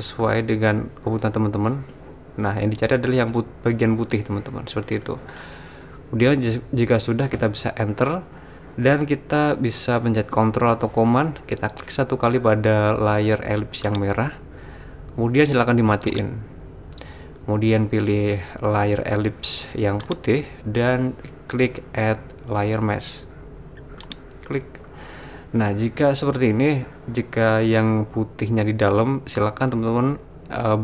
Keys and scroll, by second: 7.4 Return.